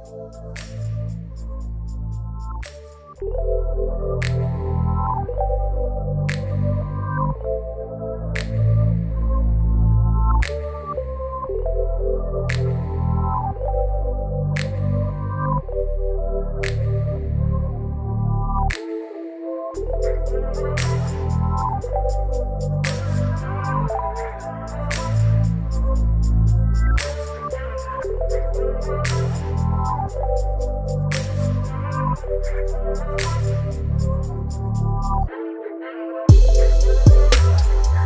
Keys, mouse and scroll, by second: 2.8 click, 4.7 ctrl+t, 6.9-9.8 drag, 11.4-22.9 shift+drag, 22.9 ctrl+t, 25.2-28.3 drag, 32.2 ctrl+t, 33.5-38.0 drag.